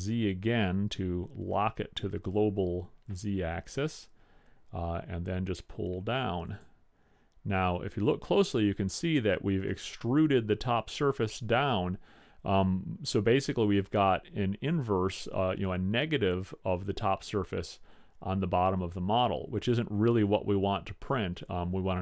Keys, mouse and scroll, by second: 20.3-22.0 middle drag.